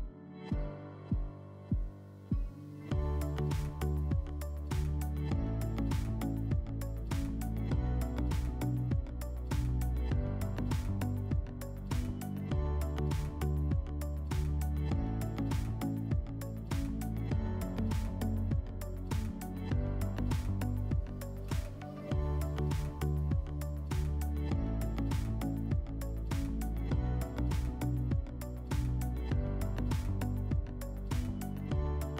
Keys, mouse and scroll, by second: 0.5-2.1 drag, 8.3 1, 12.3 click, 17.6 click, 24.5-26.0 drag, 27.2 click.